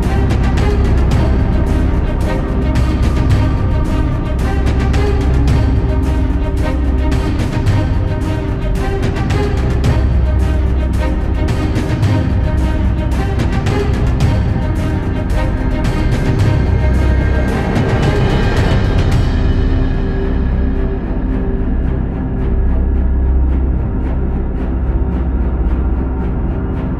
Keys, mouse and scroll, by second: 0.8 r, 2.1 g, 2.8 click, 3.4 KP_7, 3.9 g, 4.7 click, 4.9 g, 6.2-7.1 scroll down 3, 6.4 middle click, 7.1 middle click, 7.9 shift+z, 8.5-9.1 middle drag, 9.1 Tab, 9.3 drag, 9.5-10.1 middle drag, 10.1-10.5 scroll down 1, 10.5 click, 11.4-12.0 middle drag, 12.0 KP_1, 12.5 click, 13.0 g, 13.9-15.4 middle drag, 15.4 scroll up 2, 15.6-16.3 middle drag, 16.3 Tab, 16.5-16.9 scroll up 1, 16.9-17.9 middle drag, 17.9 shift+z, 18.3 KP_7, 19.1 1, 19.5 click, 20.2 KP_1, 21.2 s, 22.2-23.3 middle drag, 23.3 shift+z, 23.5-24.9 middle drag, 24.9 KP_3, 26.2 g.